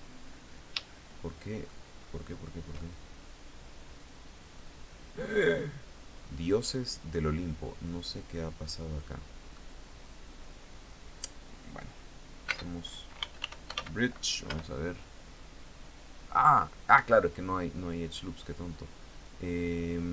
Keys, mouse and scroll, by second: 0.4-1.4 shift+drag, 2.3-9.2 shift+drag, 12.0-13.8 typing, 14.0 Return, 16.5 Escape, 19.6-20.1 scroll up 2.